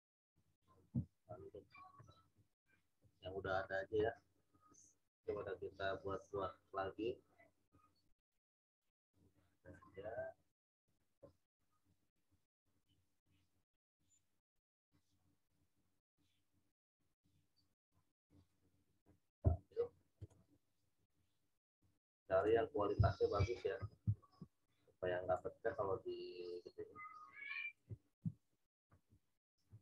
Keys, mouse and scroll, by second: 2.2-3.4 scroll down 1, 7.0 scroll down 1, 8.2 scroll up 1, 9.2 click, 12.9-13.4 scroll down 1, 18.4 right click, 20.2 click, 23.3 ctrl+v, 23.7 ctrl+t, 25.3 alt+shift+click, 28.2 Return, 29.7 ctrl+t.